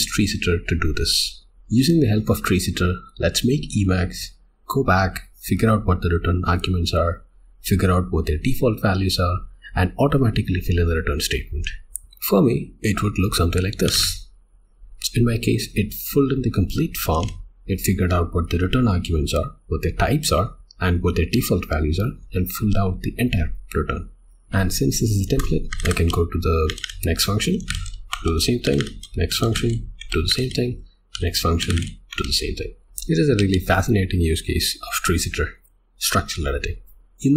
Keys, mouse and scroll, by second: 1.4 Tab, 11.9 o, 13.5-14.3 typing, 14.7 Escape, 27.1-32.2 typing, 32.9 click.